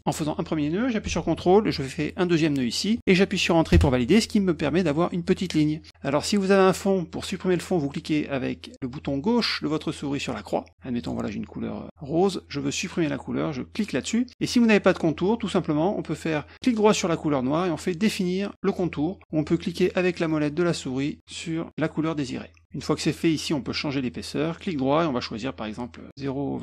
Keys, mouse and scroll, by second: 2.6 ctrl+click, 3.7 Return, 10.3 click, 11.0 click, 13.7 click, 18.7 click, 19.7 middle click, 20.1 middle click, 21.3 middle click, 21.7 middle click.